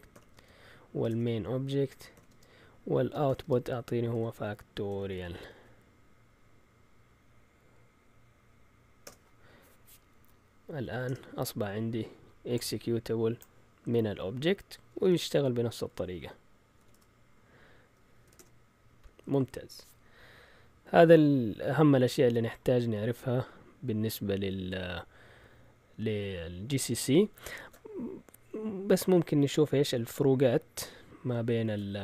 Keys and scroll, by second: 0.0-5.9 typing, 1.1 Tab, 9.0 Return, 10.6-11.4 typing, 15.0-16.8 typing, 16.9 Tab, 18.2 typing, 18.3 Return, 27.6 ctrl+l, 31.6 shift+super+z.